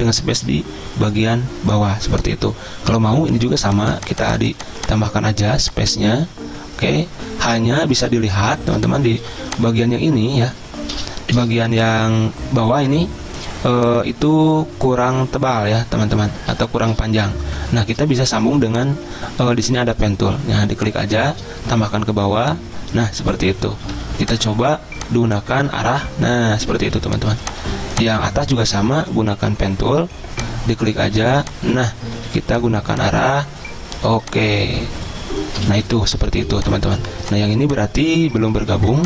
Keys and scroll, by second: 9.3 z, 11.4 v, 24.0 a, 25.9 Down, 26.9 z, 28.8 q, 29.4 p, 32.3 a, 35.9-37.6 typing, 38.5 ctrl+z.